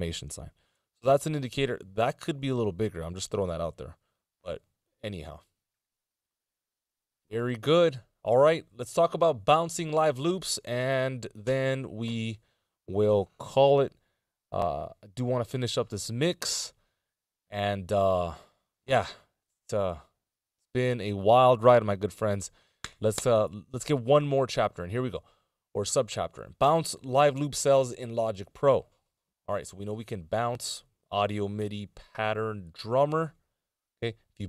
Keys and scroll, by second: 4.3 z.